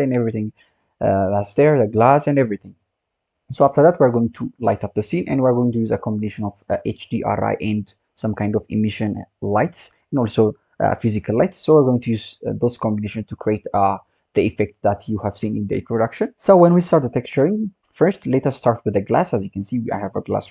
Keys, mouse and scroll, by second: 1.2-2.3 scroll up 1, 2.3-3.6 scroll up 3, 3.6-6.8 scroll down 1, 14.2-15.3 scroll down 1, 15.3-16.4 scroll up 1, 18.8 click, 20.4 click.